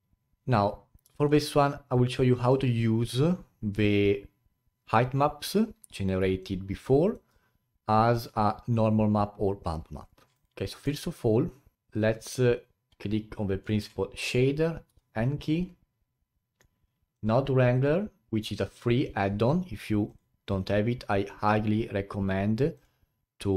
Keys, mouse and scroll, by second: 1.1-1.5 alt+middle drag, 1.5-14.9 alt+drag, 14.9 n.